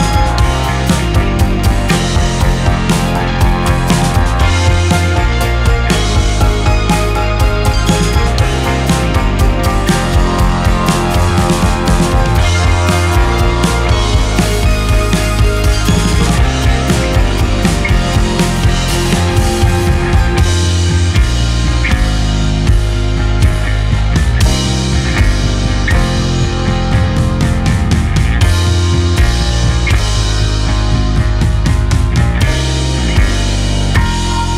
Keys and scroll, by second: 3.8 ctrl+space, 26.2 ctrl+space.